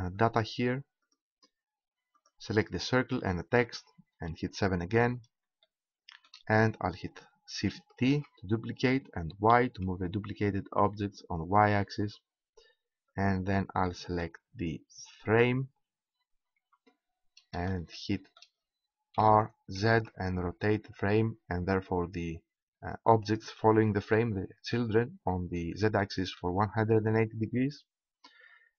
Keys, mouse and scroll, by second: 0.5-3.8 right drag, 4.4 KP_7, 8.1 shift+d, 11.5-12.5 drag, 13.8 right click, 14.0-15.2 middle drag, 16.5 KP_7, 19.2 r, 23.4-25.2 drag, 25.2 middle click.